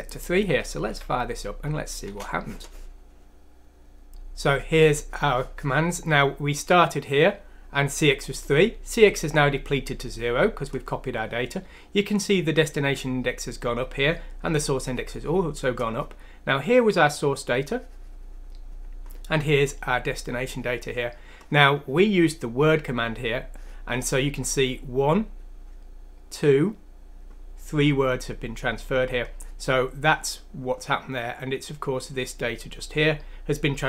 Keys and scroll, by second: 0.9 F6, 2.1 Return.